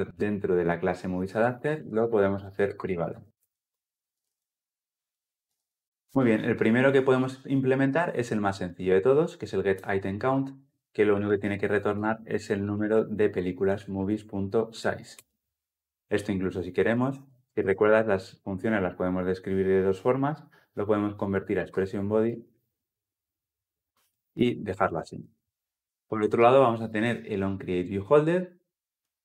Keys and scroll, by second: 5.2 ctrl+alt+l, 5.3 ctrl+alt+o, 11.8 Return, 17.3 Return, 22.4 alt+Return, 24.9 ctrl+alt+l, 25.0 ctrl+alt+o.